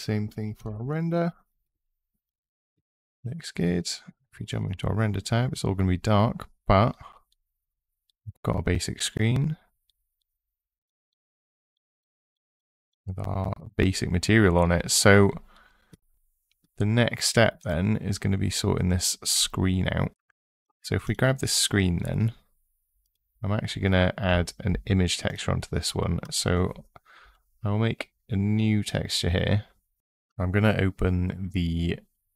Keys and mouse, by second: 0.6 KP_0, 10.0 click, 10.9 click, 11.8 middle drag, 12.3 click, 22.8 click, 25.1 click, 26.0 click.